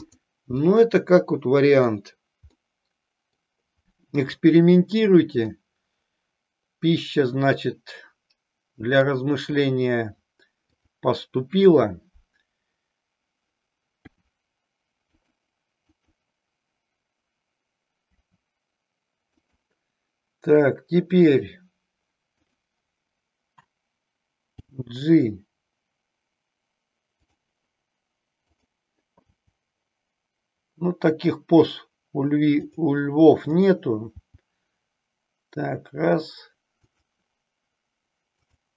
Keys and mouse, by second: 0.7-1.9 middle drag, 2.4-3.6 middle drag, 5.4-9.2 middle drag, 14.1 r, 15.8-17.7 drag, 18.1 r, 22.4 click, 24.4 g, 27.3 click, 30.2 g, 32.7 click, 35.2 g, 38.4 click.